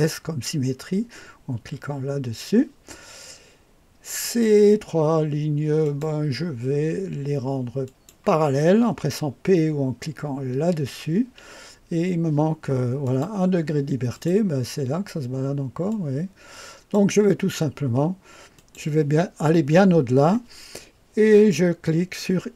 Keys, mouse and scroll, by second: 1.5 s, 4.2 click, 5.8 click, 7.8 click, 10.2-11.0 typing, 13.0 click, 14.1 click, 15.9-16.9 drag, 18.5 click.